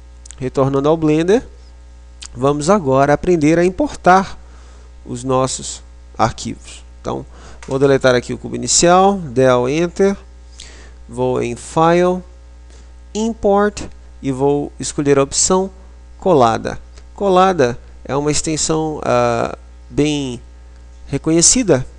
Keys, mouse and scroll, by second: 6.8 Delete, 11.5 click.